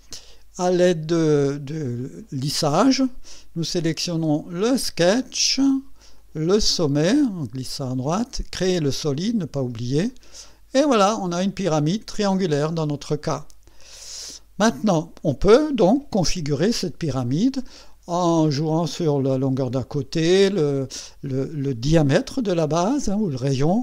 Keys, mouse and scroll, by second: 2.0 click, 3.6 click, 4.5 click, 5.4 click, 6.2 click, 7.1 click, 8.9 click, 10.1 click, 10.8 scroll down 1, 11.4-13.7 drag, 13.8-15.4 drag, 15.8-17.8 drag, 18.7 click, 19.9 click, 22.9-23.8 drag.